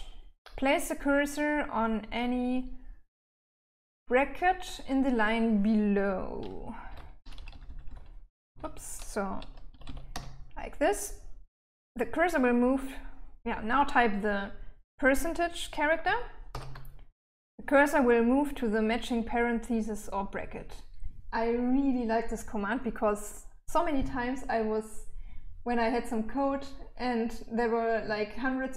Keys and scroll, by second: 6.1-7.7 typing, 8.9 l, 9.1 l, 9.3 l, 15.7 shift+5.